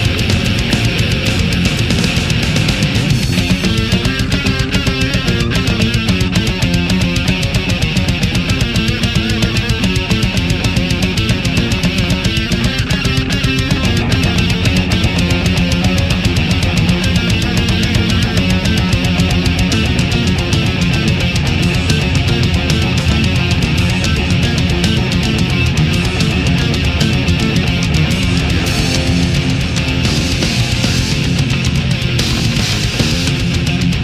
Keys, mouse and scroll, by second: 1.1 right click, 1.6 middle click, 3.4 shift+right click, 4.6-6.1 drag, 6.6 right click, 7.1-8.5 drag, 8.6 middle click, 9.4-10.1 middle drag, 10.5-12.1 middle drag, 12.1-14.1 middle drag, 15.6 right click, 16.1 shift+right click, 16.5 shift+middle click, 17.1 shift+right click, 17.9-18.9 drag, 18.9-21.5 middle drag, 22.0 shift+right click, 22.6 shift+right click, 22.9-23.5 shift+middle drag, 24.0-25.5 drag, 25.9 right click, 26.6 click, 27.6-28.6 middle drag, 28.6 middle click, 29.9-31.9 middle drag, 32.1-34.0 middle drag.